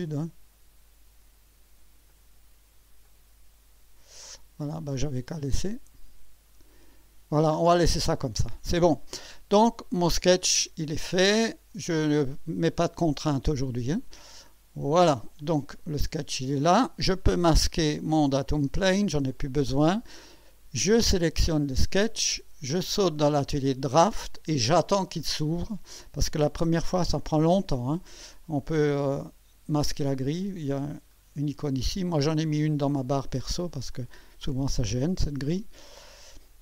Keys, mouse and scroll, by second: 2.1 click, 3.0 click, 4.9 click, 5.5 click, 7.6 scroll down 1, 8.1 scroll up 1, 8.8 scroll down 2, 14.1 click, 15.4-16.6 drag, 17.5 scroll down 2, 18.3 click, 18.7 space, 19.3-20.2 drag, 21.0 click, 22.9 click, 23.8 click, 31.1 click, 33.9-36.4 drag.